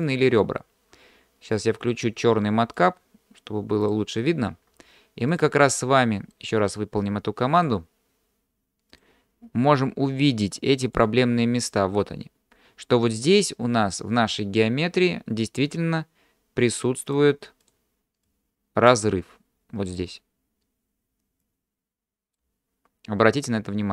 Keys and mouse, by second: 2.8-4.5 drag, 5.8 middle click, 7.6 click, 9.1-11.0 drag, 17.1 click, 18.3 click, 21.5-22.4 drag, 23.6-23.9 middle drag.